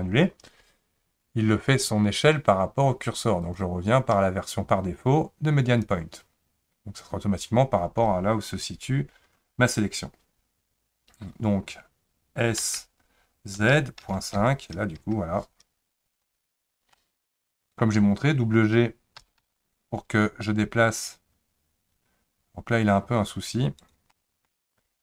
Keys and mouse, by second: 3.4-5.9 drag, 12.6 s, 17.0 middle click, 19.2 g, 24.1 middle click.